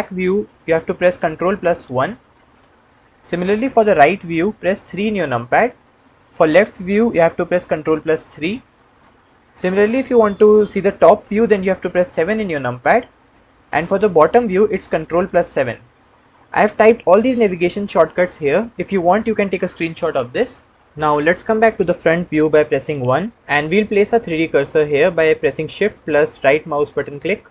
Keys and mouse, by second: 1.7 ctrl+KP_1, 4.9 KP_3, 8.0 ctrl+KP_3, 12.2 KP_7, 15.2 ctrl+KP_7, 23.0 KP_1, 26.9 shift+click.